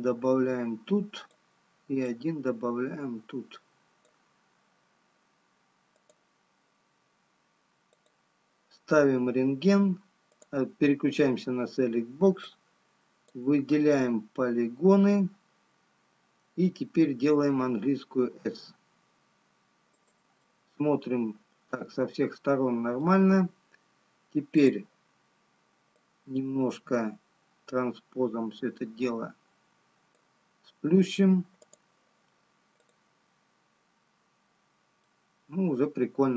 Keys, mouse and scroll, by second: 0.3 click, 19.1 s, 21.8 middle click, 25.5 click, 27.1 click, 34.5-36.0 scroll up 1, 36.0 middle click.